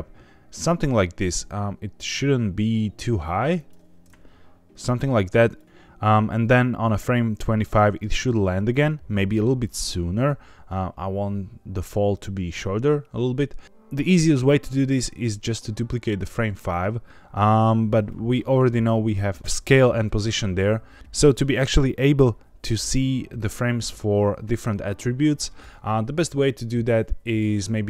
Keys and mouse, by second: 3.5 click, 5.5 click, 6.8 click, 8.7 click.